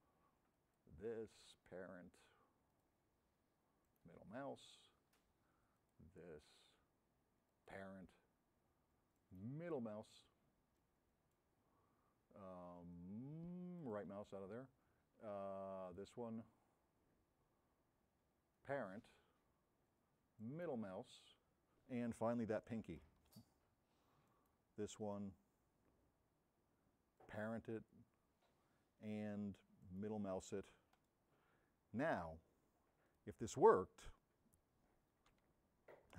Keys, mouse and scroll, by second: 3.9 middle click, 4.6 right click, 7.5-11.5 drag, 9.2 middle click, 13.9 right click, 18.6 click, 20.5 middle click, 22.6 s, 25.1 right click, 31.0 right click.